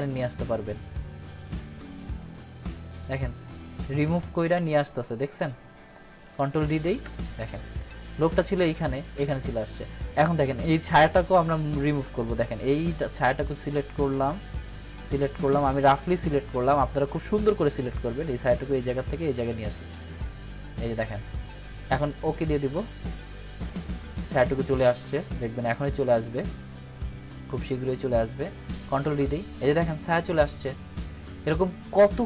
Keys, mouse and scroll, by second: 6.3 click, 6.8 ctrl+d, 12.0-17.0 drag, 19.9 click, 28.6 click, 29.0 ctrl+d.